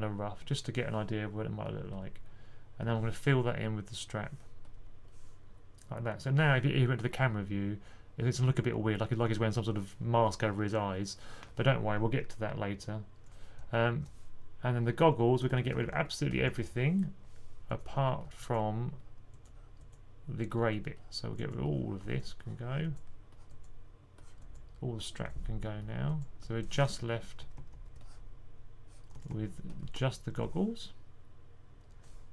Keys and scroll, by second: 15.8 1, 27.3-27.6 typing, 28.8-30.2 typing.